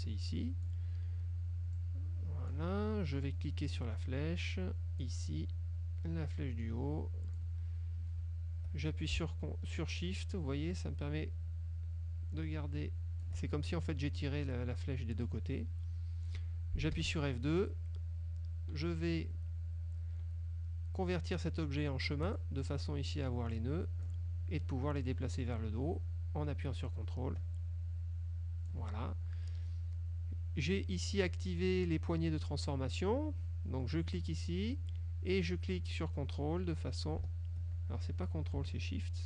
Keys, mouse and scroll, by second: 1.8 click, 3.8-5.3 drag, 6.4-7.6 drag, 9.8-13.6 shift+drag, 17.1 F2, 22.4 click, 23.6 click, 25.6-29.0 drag, 34.3-39.2 drag.